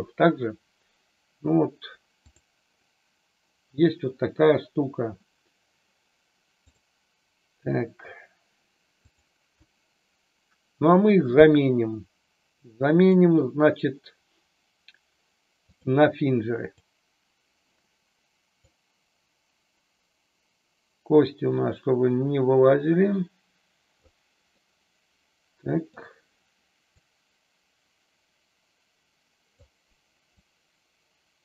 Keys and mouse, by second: 6.7-9.2 drag, 13.1-15.8 drag, 16.6 click, 18.6-23.9 drag, 24.4-26.1 middle drag, 26.8-29.5 drag, 30.3-31.4 drag.